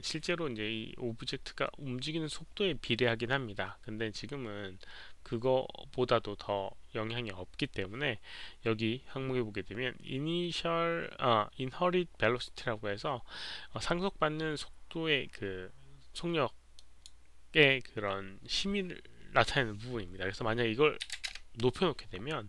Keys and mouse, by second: 16.7 click, 21.0 click, 21.0 KP_2, 21.1 KP_0, 21.2 Return.